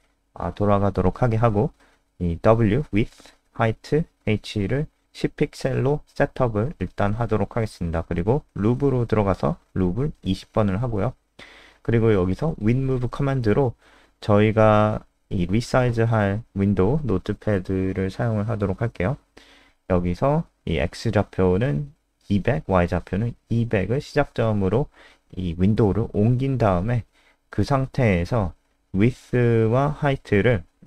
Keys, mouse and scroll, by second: 0.0-1.2 typing, 1.8 Return, 3.0-4.7 typing, 3.4 Return, 7.7-9.1 typing, 9.3 Return, 10.1-14.3 typing, 18.9-22.0 typing, 24.2-24.9 typing, 27.7 w.